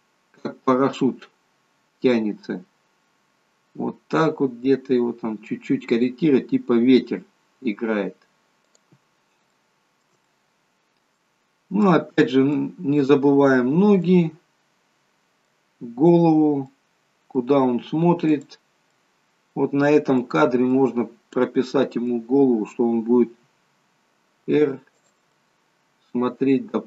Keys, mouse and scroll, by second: 9.6 shift+middle click, 10.3 middle click, 11.9 middle click, 12.9 scroll up 3, 14.1 middle click, 16.7 middle click, 18.4 click, 19.0 middle click, 20.7 middle click, 23.4 r, 25.4 middle click.